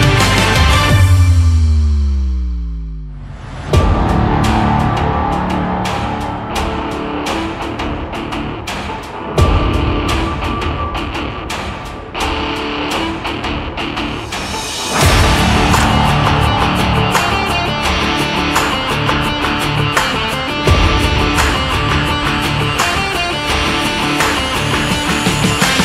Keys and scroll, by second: 4.9 ctrl+z, 12.3 Up, 18.5 Down.